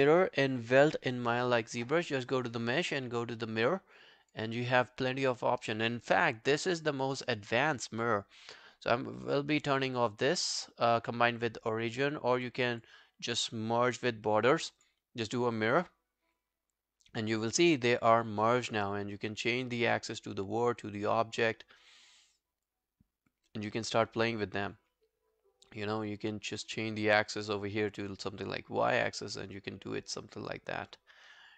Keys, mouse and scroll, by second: 12.8 double click.